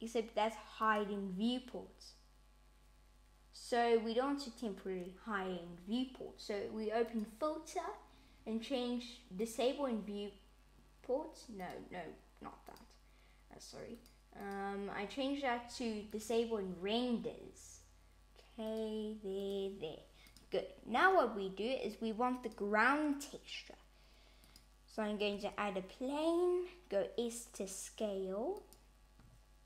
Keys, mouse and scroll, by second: 0.8 click, 7.0 click, 11.5 click, 18.6 click, 19.3 click, 22.3 click, 25.2 s.